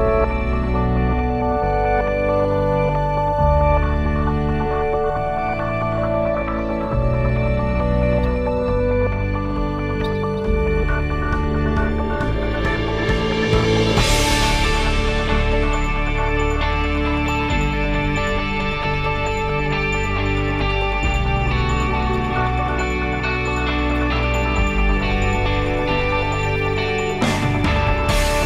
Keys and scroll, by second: 13.3 8, 13.8 Return.